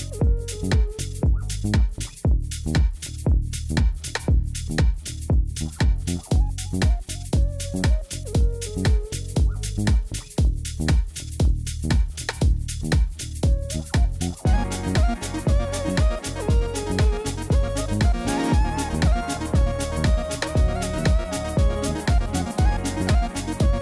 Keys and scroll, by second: 11.9 ctrl+c, 19.0-20.7 typing, 20.9 Return.